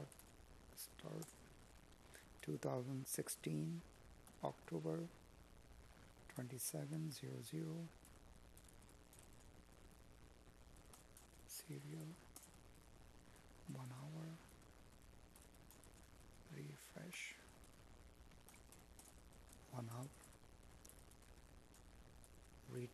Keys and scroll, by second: 4.4 Tab, 5.1 space, 8.8 Tab, 10.2 Tab, 11.8 space, 15.4 Tab, 16.3 Tab, 17.3 space, 20.6 Tab, 21.7 Tab, 22.6 space.